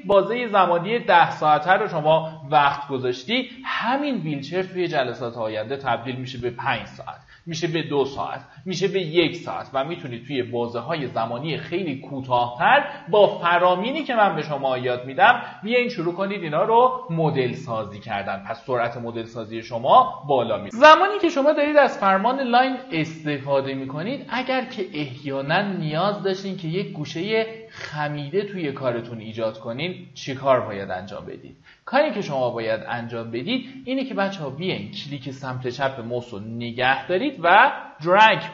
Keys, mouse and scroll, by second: 21.0 typing, 22.7-38.5 drag.